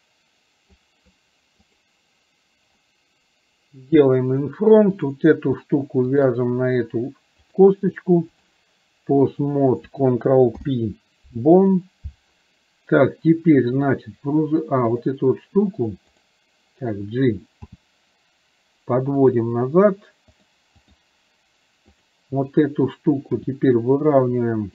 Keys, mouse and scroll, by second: 3.9 click, 6.1 shift+click, 7.5-8.6 drag, 13.9 click, 15.0 click, 16.1 click, 20.6 click.